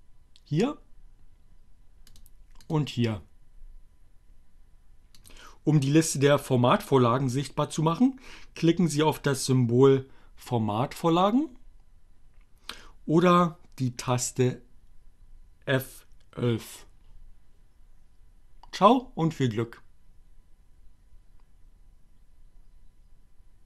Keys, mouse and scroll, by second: 1.4 click, 2.9 click, 3.7-5.5 drag, 13.8 click.